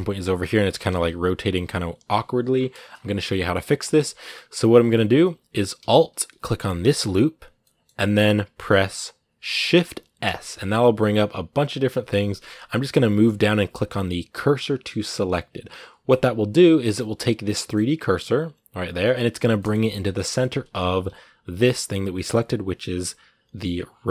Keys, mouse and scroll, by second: 0.2 scroll down 2, 0.5 r, 2.3 scroll down 2, 2.7 scroll up 2, 3.1 middle click, 3.3 scroll up 2, 3.6 Tab, 4.1-6.7 middle drag, 6.7 alt+right click, 7.4-16.0 middle drag, 17.3-20.5 middle drag, 20.5-20.8 scroll down 1, 20.8 g.